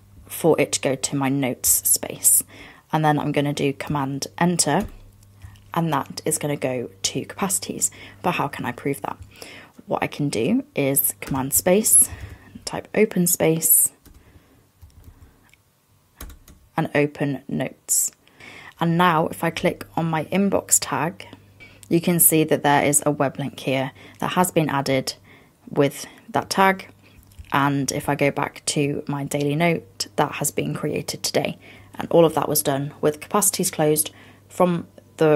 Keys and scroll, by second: 4.9 super+Return, 11.3 super+space, 14.9 fn+Down.